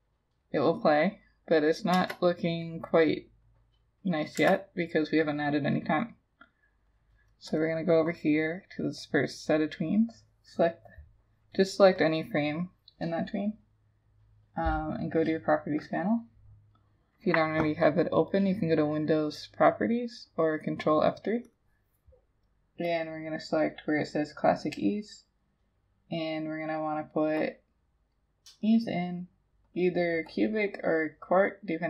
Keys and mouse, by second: 2.0 Return, 4.4 Return.